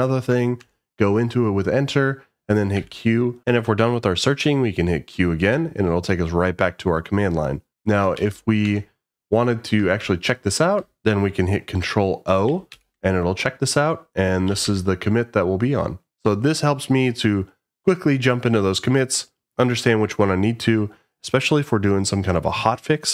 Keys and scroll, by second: 0.6 Return, 5.4 q, 8.2 Up, 8.6 Return, 10.0 Down, 12.7 ctrl+o, 14.2-15.0 typing.